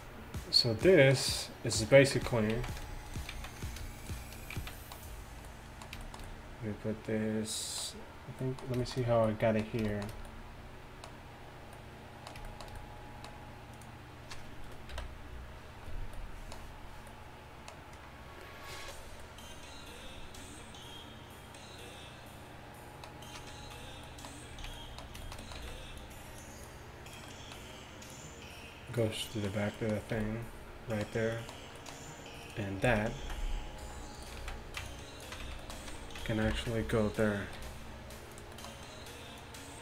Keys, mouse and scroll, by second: 2.2 z, 2.6 z, 3.4 z, 4.6 z, 24.1-25.1 middle drag, 24.6 z, 25.6 z, 28.9-29.8 drag, 28.9-29.8 middle drag, 30.2 a, 32.5-34.4 drag, 32.9 z, 33.2 z, 33.9 g, 34.4 z, 34.9 click, 35.5 z, 36.5 ctrl+KP_1, 37.6 g, 39.5-39.8 drag.